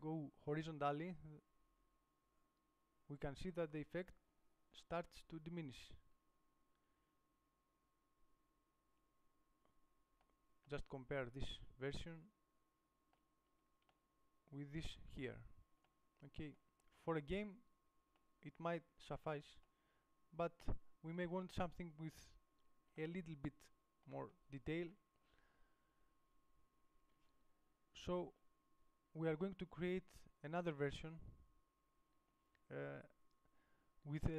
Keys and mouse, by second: 1.3 middle click, 11.2 middle click, 12.6 middle click, 20.8 middle click, 21.4 middle click, 28.4 KP_7.